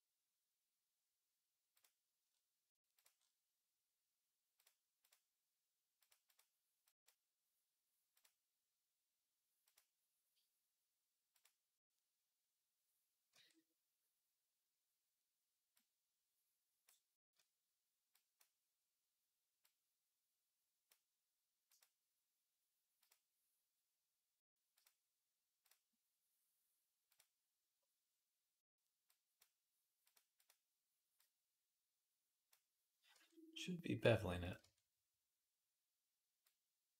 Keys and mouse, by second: 5.8-13.2 drag, 5.8-13.2 middle drag, 13.1 Tab, 17.0 Tab, 18.2-19.4 drag, 27.0-28.9 drag, 32.9 Tab, 34.3-36.2 drag, 34.4 Tab.